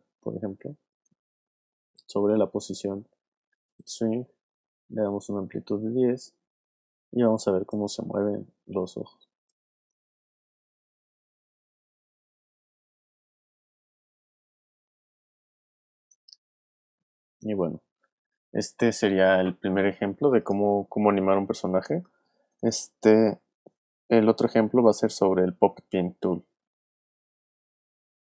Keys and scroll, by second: 9.7 space, 15.9 space, 22.0 alt+space.